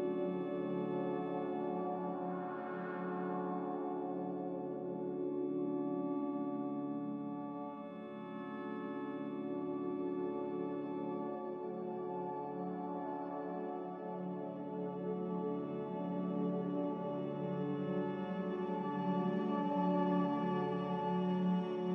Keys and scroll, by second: 21.8 ctrl+z.